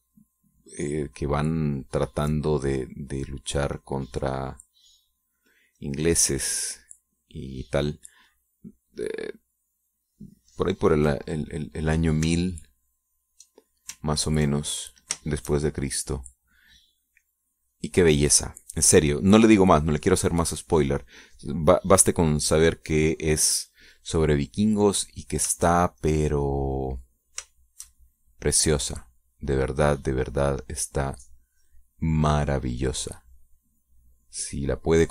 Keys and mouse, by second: 1.0 shift+click, 1.4-6.8 shift+drag, 8.5 middle click, 8.6 click, 15.6 ctrl+click, 16.3-19.4 ctrl+shift+drag, 19.7 middle click, 20.2 middle click, 21.0 middle click, 24.6 middle click, 26.3 click, 27.0-28.9 shift+drag, 28.9-35.1 shift+drag.